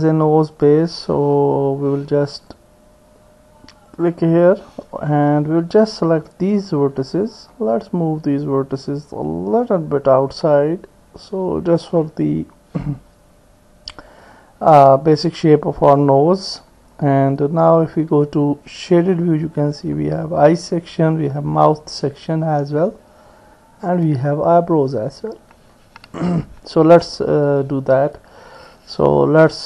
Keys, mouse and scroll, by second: 1.6 ctrl+r, 5.2-6.3 drag, 7.4-12.3 drag, 18.3 click.